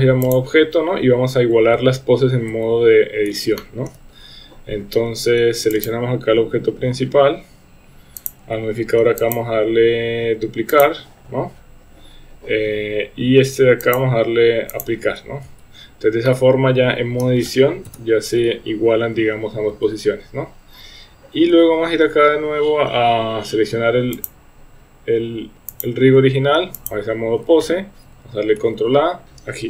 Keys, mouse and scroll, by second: 1.8 Tab, 2.6 Tab, 3.6-3.9 shift+middle drag, 5.8 click, 9.3-10.9 drag, 13.9-14.9 drag, 15.5 Tab, 16.3 middle click, 17.9 KP_1, 19.7 Tab, 24.3 click, 25.9-26.9 drag, 28.6 ctrl+a.